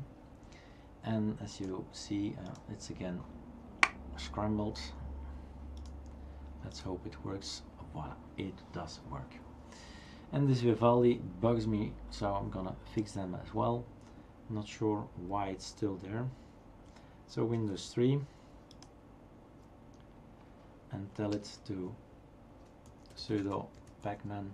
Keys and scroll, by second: 17.8 super+", 22.6-24.5 typing.